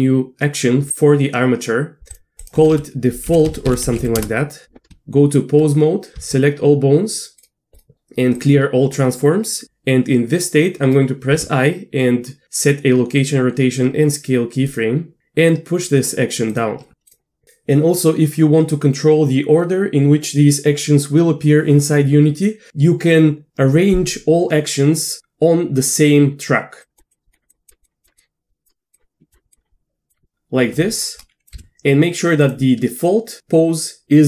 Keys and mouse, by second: 2.1 drag, 2.5-4.6 drag, 4.9 Tab, 6.2 a, 7.4-8.4 drag, 9.6 i, 11.3 i, 27.1 click, 27.5 click, 27.8 click, 28.2 click, 28.9 click, 29.5 click, 31.0-31.4 drag, 31.6 Delete, 32.4 click.